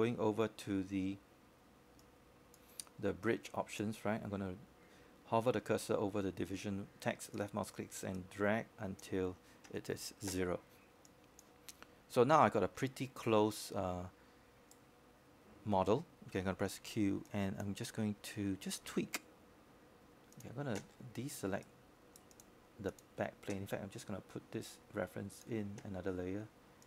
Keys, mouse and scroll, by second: 4.2 shift+right click, 13.4-23.3 drag, 23.3-23.7 scroll down 1, 23.7-25.2 scroll up 1, 25.2-26.6 right drag.